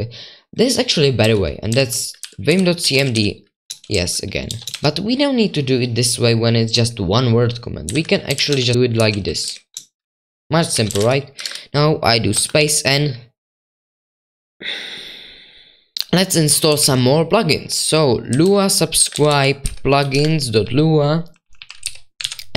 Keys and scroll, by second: 1.0-6.8 typing, 7.9-12.9 typing, 15.9-19.0 typing, 19.1 ctrl+w, 21.1-22.5 typing.